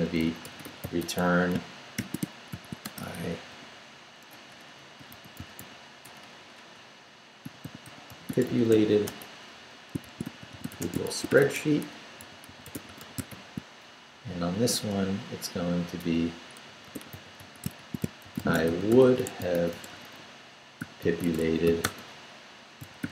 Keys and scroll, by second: 0.0-6.0 typing, 7.2-13.8 typing, 14.1 shift+Down, 14.9 Return, 16.1-23.1 typing.